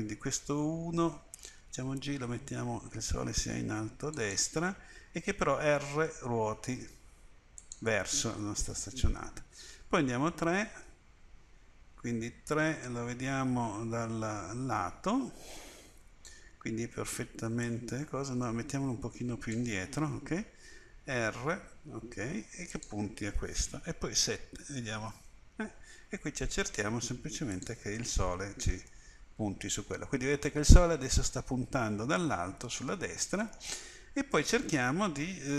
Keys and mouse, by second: 1.7 g, 5.6 r, 9.8 KP_3, 17.7-19.5 drag, 21.0 r, 24.2 KP_7, 26.7 r, 29.1-30.5 middle drag, 30.5 click, 30.8 middle click, 34.3-35.5 middle drag.